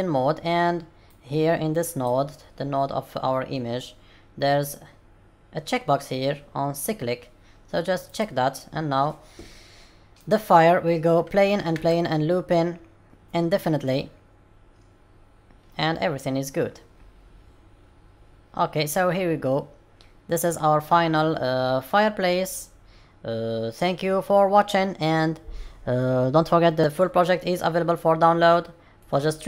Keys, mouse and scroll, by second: 10.1 click, 11.7 space, 20.1-21.4 scroll down 7, 26.8 middle click, 26.8-27.4 scroll down 2, 27.4 middle click, 28.3-29.0 scroll down 2, 29.0 middle click.